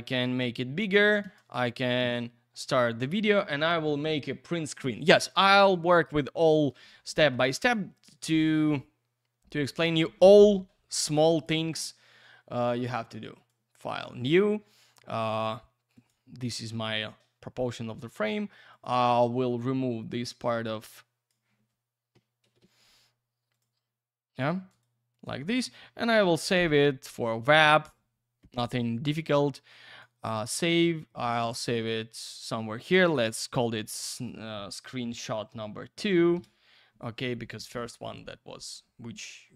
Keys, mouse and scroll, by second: 1.2 space, 4.0 Print, 7.3 Escape, 7.9 click, 9.5 click, 11.4 click, 12.7 click, 13.4 click, 15.9 click, 17.0 ctrl+v, 18.7 click, 20.1 click, 22.4 shift+F5, 23.5 click, 24.7 right click, 25.1 click, 29.0 click, 31.7 click, 33.1 click, 33.5 click, 35.5 BackSpace, 36.3 Return.